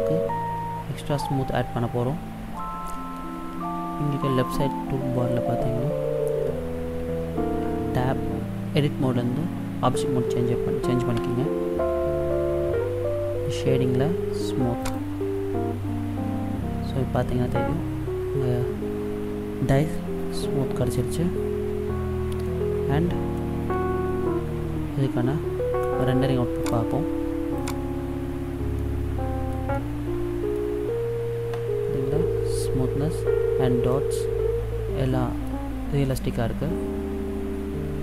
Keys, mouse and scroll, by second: 11.2 Tab, 14.9 click, 22.4 middle click, 23.6 scroll down 1, 26.7 click, 28.9 middle click, 29.8 middle click, 34.0 middle click, 36.8-37.2 scroll down 1.